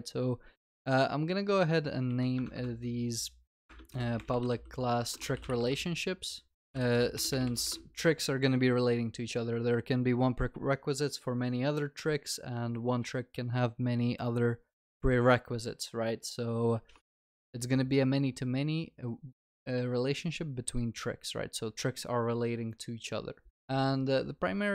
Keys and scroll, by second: 3.7 Return.